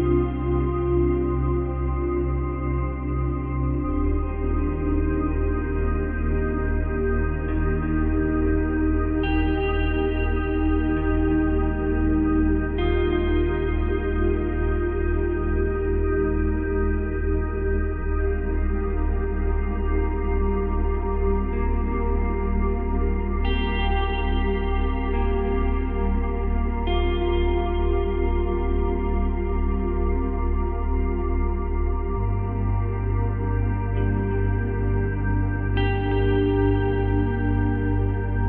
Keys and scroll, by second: 7.2 space, 8.7 space, 14.3 space, 16.1 space, 32.9 Delete.